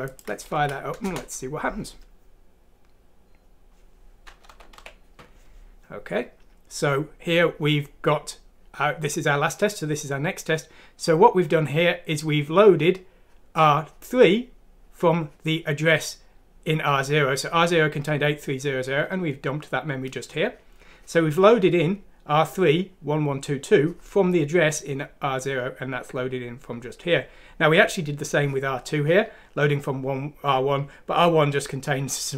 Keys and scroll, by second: 0.5 F6, 1.0 Return, 4.5 typing.